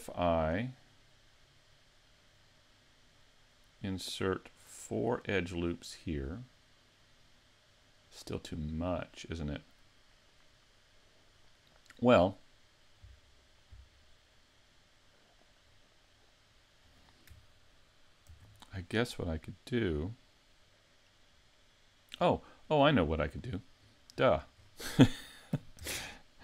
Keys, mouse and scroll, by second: 9.1 middle click, 15.7-16.3 scroll up 1, 16.3-18.3 scroll down 4, 18.3 ctrl+r, 22.7 right click, 23.8-24.3 scroll up 2, 24.3 shift+middle click, 25.8 ctrl+r.